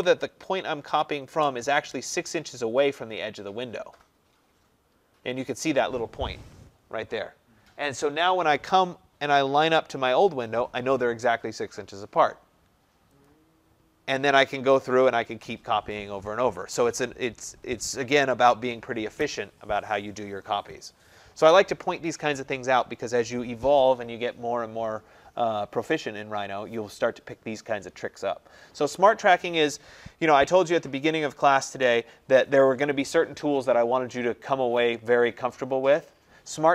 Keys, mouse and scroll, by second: 0.0-0.9 typing, 1.4 Return, 13.3-18.4 drag, 31.9 Escape.